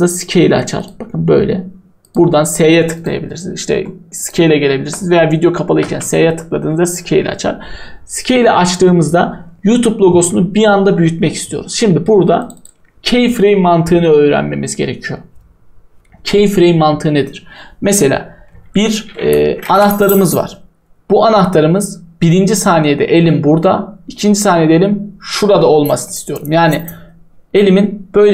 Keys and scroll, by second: 5.5-6.4 typing.